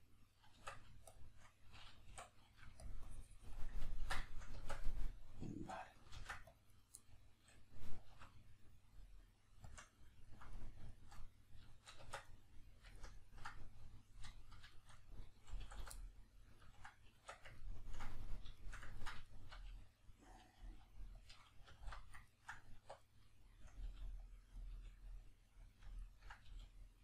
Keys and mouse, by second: 0.5 Tab, 1.1 shift+click, 2.9 click, 3.9 ctrl+middle click, 4.3 shift+middle click, 4.6 b, 4.9-6.1 middle drag, 6.1 ctrl+r, 6.8 right click, 7.0 middle click, 8.1 alt+s, 9.7 shift+click, 9.9 middle click, 10.5-18.3 middle drag, 12.0 Tab, 15.7 a, 17.2 Tab, 18.3 right click, 18.6 shift+right click, 19.0-21.2 ctrl+shift+middle drag, 20.6 g, 21.2 click, 21.6 alt+q, 22.2 ctrl+middle click, 22.8 1, 23.0 right click, 23.8 g, 24.3 click, 24.5 right click, 24.7 g, 25.2 click, 26.0 ctrl+middle click, 26.4 g.